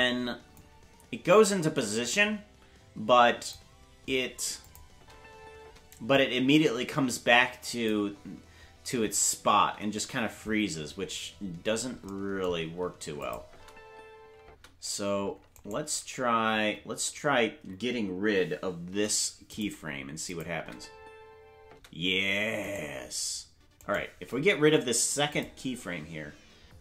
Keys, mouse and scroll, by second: 0.5 click, 1.5-3.5 drag, 4.6 click, 4.9 space, 6.1-7.8 drag, 6.1 space, 11.3-11.7 scroll up 1, 12.0-12.7 scroll up 5, 13.2 click, 13.4 space, 15.5-16.5 right drag, 15.5 space, 16.5 h, 18.9 Delete, 20.3 click, 20.5 space, 22.6-24.0 right drag, 22.6 space, 24.6 Delete.